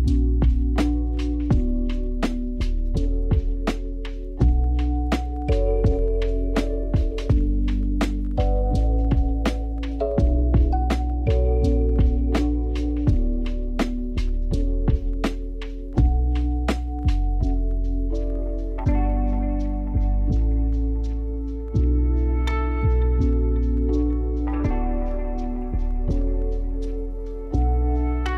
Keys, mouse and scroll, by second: 0.5-1.4 scroll up 4, 1.4 click, 2.6 shift+click, 4.5 ctrl+j, 7.8 s, 9.9 ctrl+z, 17.1 s, 19.1 g, 21.5 click, 22.4 s, 24.9-26.9 drag, 26.9 g.